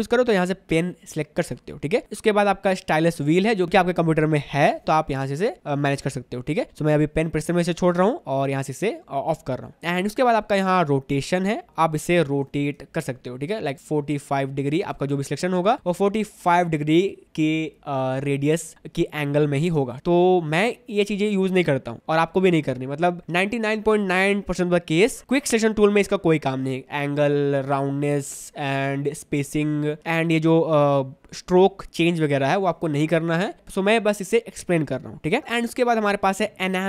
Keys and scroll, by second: 12.6 4, 12.9 Return, 15.0 ctrl+d, 19.9 0.